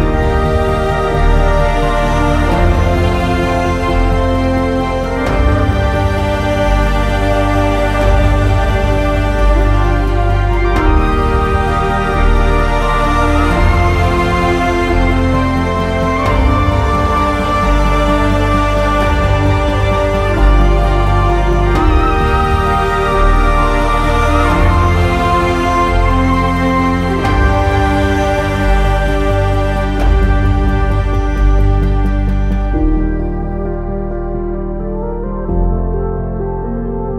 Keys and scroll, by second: 1.3 e, 36.8 Down, 36.8 typing.